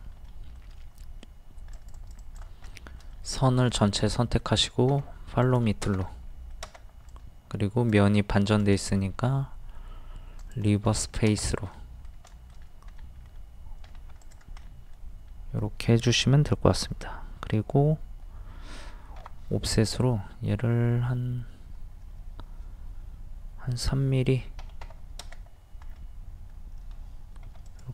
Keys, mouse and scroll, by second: 0.2 middle click, 1.7 click, 2.7 shift+middle click, 3.8 shift+middle click, 4.9 f, 5.4 click, 6.1 middle click, 7.1 click, 8.6 right click, 10.4 click, 10.9 middle click, 12.3 shift+middle click, 13.8 scroll up 1, 14.2 click, 14.6-15.7 middle drag, 19.2 o, 19.8 click, 24.6 KP_3, 25.9-26.3 scroll up 1, 27.5 d, 27.7-27.9 drag.